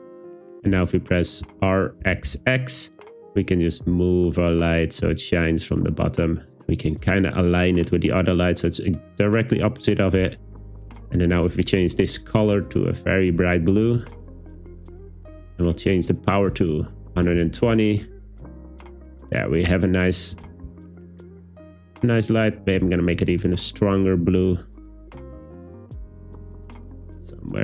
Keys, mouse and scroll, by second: 1.4 r, 2.0 x, 2.3 x, 9.9 click, 16.5-17.5 drag, 20.3 g, 20.5 z, 20.7 z, 22.3 click.